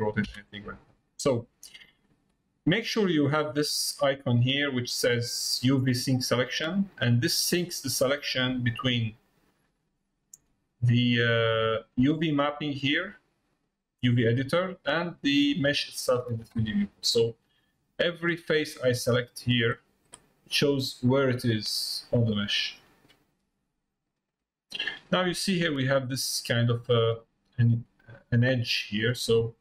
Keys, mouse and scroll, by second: 6.5 click, 8.5 click, 9.5 click, 12.5 middle click, 14.2 click, 15.3 middle click, 18.5 click, 19.1 click, 19.6 click, 20.4 middle click, 21.8 middle click, 24.7 middle click, 25.9 scroll down 2, 26.7-27.0 scroll down 2, 27.8 scroll down 2, 27.9-29.2 middle drag.